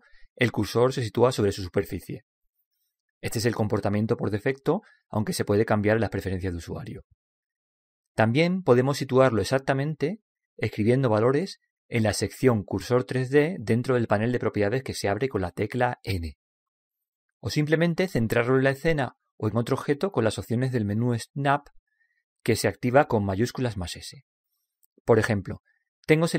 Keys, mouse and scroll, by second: 0.4 click, 0.9-2.7 middle drag, 1.3 click, 13.0 n, 13.8-15.6 drag, 21.7 n.